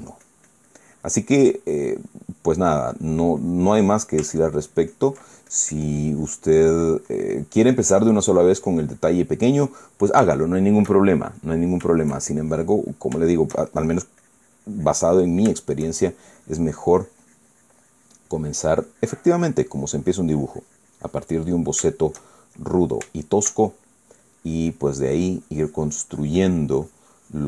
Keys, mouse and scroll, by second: 0.1 click, 0.4 middle click, 0.7-2.9 drag, 2.9 middle click, 3.5-4.9 drag, 5.0-6.9 ctrl+drag, 7.0 ctrl+middle click, 7.5 click, 8.8-9.9 drag, 10.2 middle click, 11.2-13.0 shift+middle drag, 13.2 shift+click, 13.9 shift+middle click, 14.9 shift+click, 15.8 middle click, 16.3 shift+middle click, 17.0-22.1 shift+drag, 22.1 middle click, 22.6 shift+middle click, 24.3 shift+middle click, 24.9-27.4 drag.